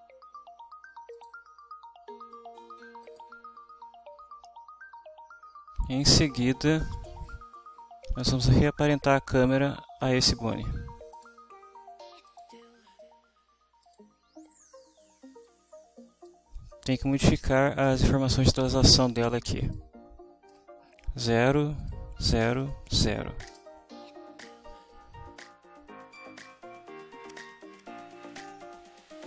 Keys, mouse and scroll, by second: 1.1 click, 3.1 click, 6.8 click, 10.1 click, 11.1 click, 12.3 click, 13.9 click, 15.5-16.4 drag, 19.6 click, 21.0 0, 21.8 click, 22.2 0, 22.6 click, 22.9 0, 23.5 Return, 26.1-29.2 drag.